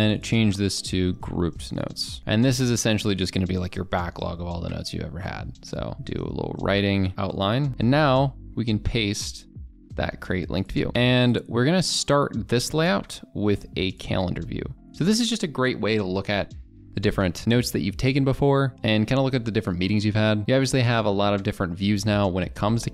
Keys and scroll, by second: 2.2 ctrl+a, 2.5 ctrl+b, 8.8 ctrl+v.